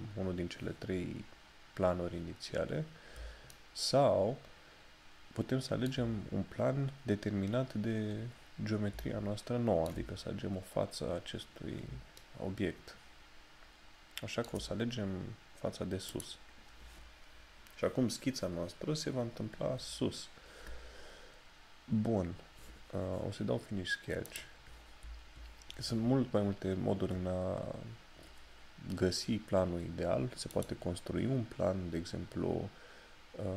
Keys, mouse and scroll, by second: 1.6 scroll down 1, 12.2 shift+middle click, 30.6 click.